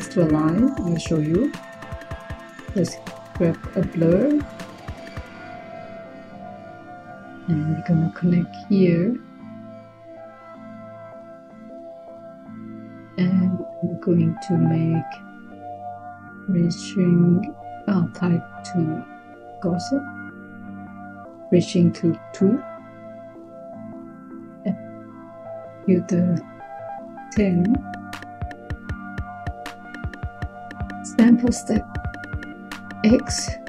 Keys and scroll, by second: 2.0 Tab, 21.7 2, 26.1-27.2 typing.